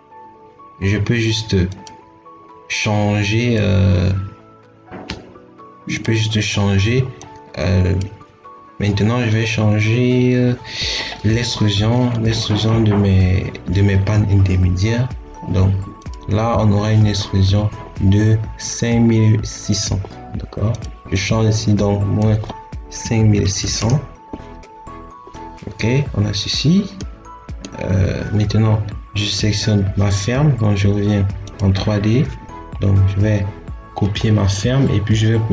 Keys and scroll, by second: 22.9 5, 23.4 6, 23.5 0.